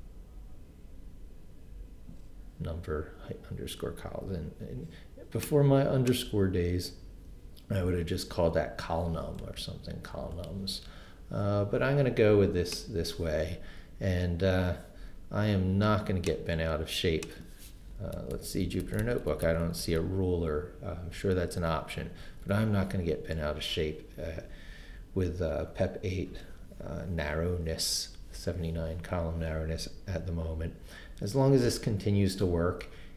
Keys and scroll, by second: 9.4 BackSpace, 17.9 Left, 18.2 Right, 18.3 Left, 18.6 Right, 18.8 Left, 19.0 Right, 19.3 Left, 19.4 Right, 22.2 Left.